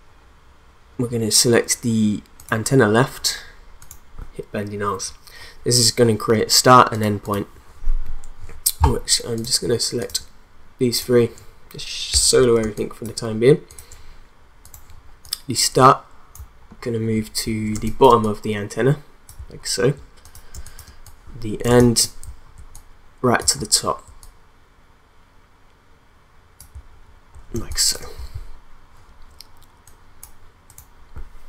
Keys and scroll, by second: 12.6 space, 17.7 space, 20.5 space, 27.6 space.